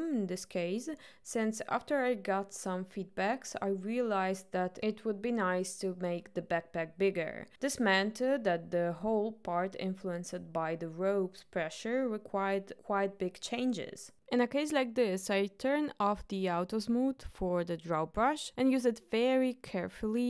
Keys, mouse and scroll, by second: 9.1 click, 15.3-15.9 drag, 18.6 shift+middle click, 18.9 click, 19.1 middle click, 19.3 click, 19.4 click, 19.6 click, 19.7 middle click, 19.8 ctrl+middle click, 19.9 click, 20.0 click, 20.2 click.